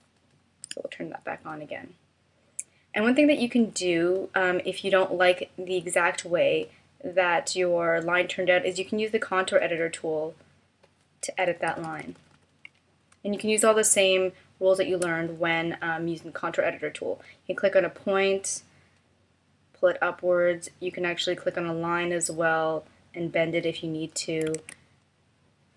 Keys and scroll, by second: 0.6 d, 11.7 super+=, 13.1 space, 24.7 super+z.